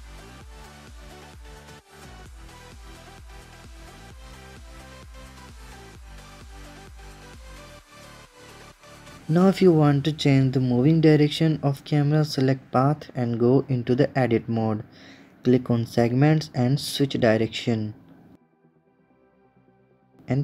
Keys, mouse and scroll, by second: 0.8-1.8 drag, 2.1 click, 2.4 click, 2.7 click, 3.5-4.5 drag, 6.4 click, 6.6 space, 10.1 space, 10.7 KP_0, 11.2 space, 13.7 click, 14.5 Tab, 15.4-18.4 drag, 18.4 Tab, 20.1 KP_0.